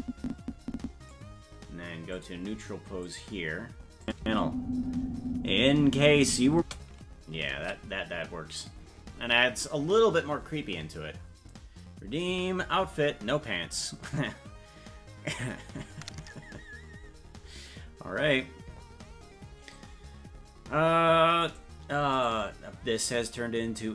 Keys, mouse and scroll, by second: 2.1 click, 3.0 click, 4.0 click, 4.2 space, 7.3 ctrl+space, 8.0 ctrl+s.